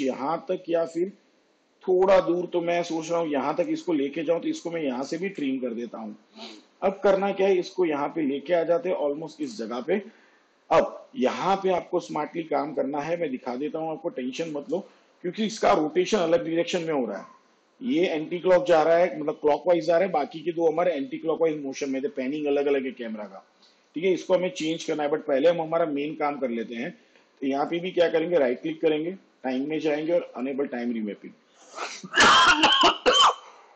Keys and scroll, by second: 5.0 alt+[.